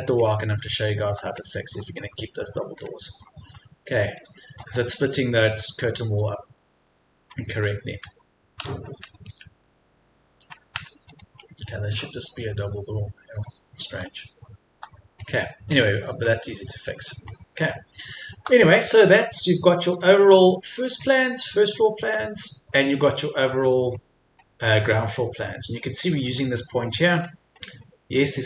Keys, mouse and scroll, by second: 2.6-3.0 scroll up 1, 3.2 middle click, 4.2 click, 4.7 scroll down 1, 7.4 scroll up 1, 8.6 Tab, 11.1 click, 13.0 Escape, 13.9 scroll down 1, 14.4 shift+middle click, 16.2 scroll down 1, 16.6 Escape, 17.0 click, 17.3 scroll up 1, 20.7-21.0 scroll down 1, 21.6 middle click, 22.9-24.0 scroll up 1, 24.0-24.3 scroll down 1, 24.3-24.7 scroll up 1, 26.2-26.9 scroll down 1.